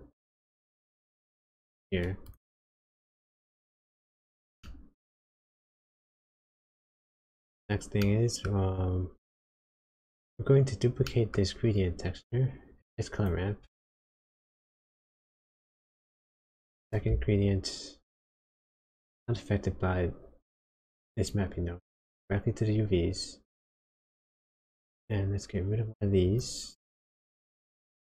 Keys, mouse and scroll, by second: 3.0 click, 3.5-4.6 scroll down 5, 4.6 middle click, 6.7 click, 7.1-7.6 scroll up 5, 8.0 middle click, 8.7-9.4 scroll up 3, 9.8-10.5 scroll down 2, 10.6-11.0 scroll down 2, 11.0 middle click, 11.6 scroll down 1, 11.7 click, 14.3 shift+d, 18.6 click, 23.6 click, 24.8 click, 26.2 click.